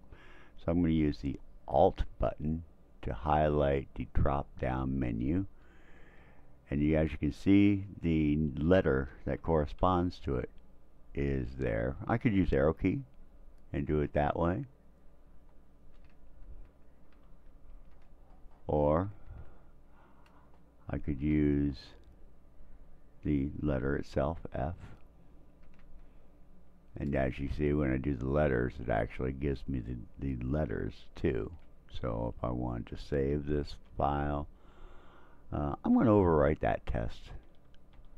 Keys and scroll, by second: 12.8 Down, 17.3 shift+Escape, 19.3 Escape, 24.4 f, 33.6 s, 36.9 Tab, 37.4 Tab, 37.5 typing, 38.0 Tab.